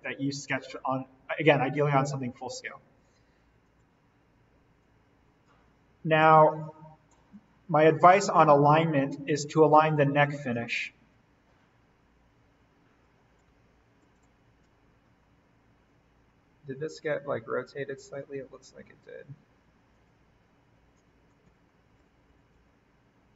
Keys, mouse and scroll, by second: 1.9-4.0 shift+drag, 4.0-4.8 scroll down 1, 4.8-8.6 drag, 8.6-9.3 shift+scroll down 1, 9.3 shift+click, 10.5-11.1 shift+scroll down 1, 11.1-13.6 shift+drag, 13.6-14.1 alt+scroll up 1, 14.7-17.6 shift+scroll up 2, 19.9-21.4 drag, 21.4 z, 22.0 ctrl+z.